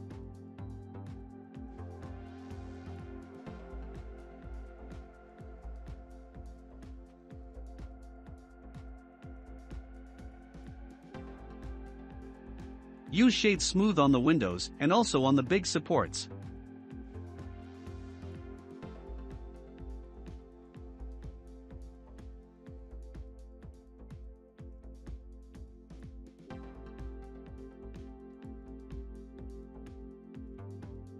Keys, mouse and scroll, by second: 1.1 click, 1.5-2.1 middle drag, 2.1 scroll up 5, 3.5 s, 4.4 s, 7.9-8.7 scroll down 2, 8.7-10.3 drag, 10.3-12.1 middle drag, 12.1 click, 13.3-16.3 right drag, 16.3 click, 18.0-21.0 middle drag, 21.2-21.6 scroll down 2, 21.6-22.5 middle drag, 22.5-23.2 scroll down 2, 23.3 click, 23.9-26.2 right drag, 26.2-27.6 drag, 27.7-28.9 drag, 28.9-30.2 middle drag, 30.2 click.